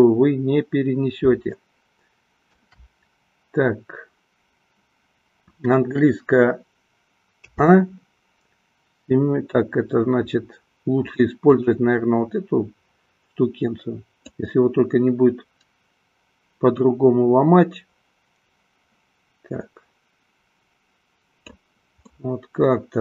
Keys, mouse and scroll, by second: 2.1 shift+middle click, 7.6 a, 11.5 click, 14.2-22.0 drag, 22.5-23.0 middle drag.